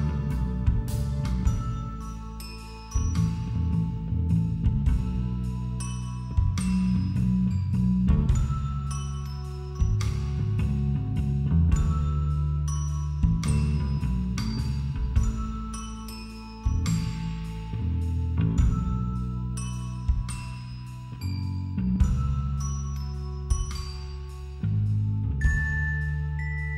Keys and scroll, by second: 2.5 ], 2.7 [, 2.9 ], 8.2 [, 8.4 ctrl+-, 23.4 ctrl+=, 23.9 space, 24.2 ctrl+=, 24.3 space, 25.4 [.